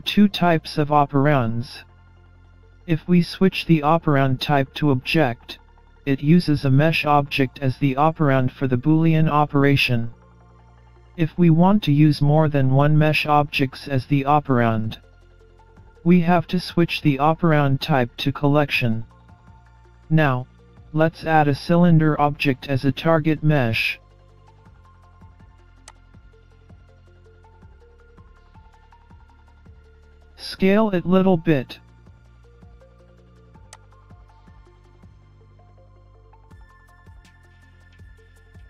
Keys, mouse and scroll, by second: 24.5 shift+a, 30.5 middle click, 33.7 s, 38.2 middle click.